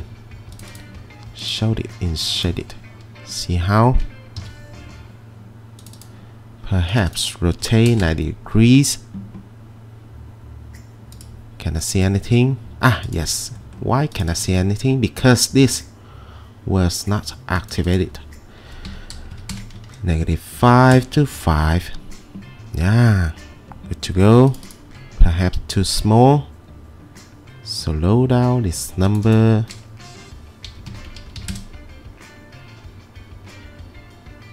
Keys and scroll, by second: 4.4 c, 7.4-8.5 typing, 19.4-21.2 typing, 19.6 Return, 20.0 Tab, 30.9-32.5 typing, 31.1 Tab, 31.5 Return.